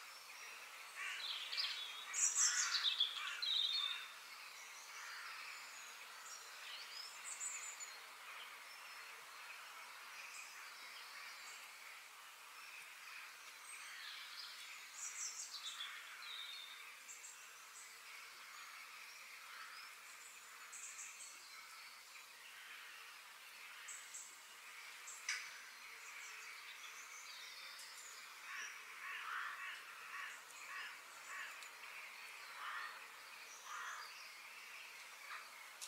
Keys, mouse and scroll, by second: 4.6 f, 9.4 KP_7, 18.6-20.5 middle drag, 24.6 KP_3, 29.3-31.2 middle drag, 31.4 g, 34.6-35.7 middle drag, 35.7 g.